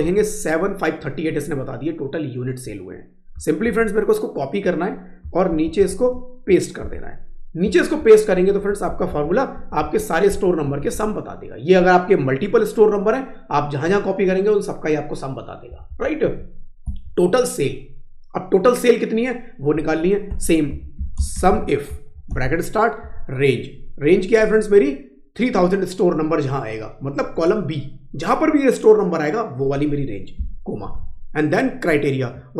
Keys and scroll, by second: 3.5 ctrl+c, 6.8 ctrl+v, 7.6 Down, 8.4 Up, 8.8 Down, 9.6 Up, 9.8 Left, 10.3 Down, 10.7 Right, 11.0 Up, 15.7 Up, 16.2 Down, 16.9 Right.